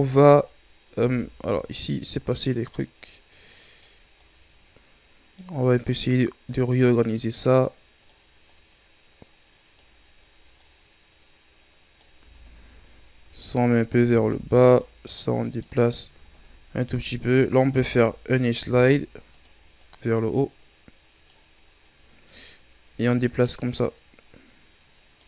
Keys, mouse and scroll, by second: 0.9 Tab, 1.7-12.2 right drag, 12.2 Tab, 12.7-13.7 scroll down 5, 13.7-14.1 scroll up 4, 14.1 Tab, 14.8-16.2 right drag, 16.2-17.6 ctrl+scroll up 5, 17.6-18.6 alt+right drag, 18.6 ctrl+e, 21.6-22.3 scroll up 2, 22.3-25.2 right drag.